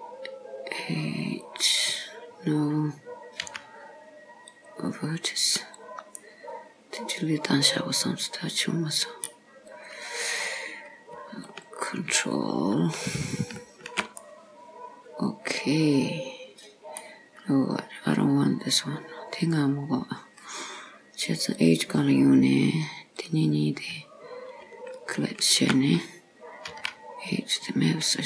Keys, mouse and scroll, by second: 4.7 x, 5.6 click, 6.4 middle click, 9.7 click, 11.5 alt+click, 13.2 alt+shift+click, 14.3 middle click, 17.6 scroll up 2, 19.5 click, 21.6 click, 23.2 click, 25.0 alt+shift+click, 26.8 x.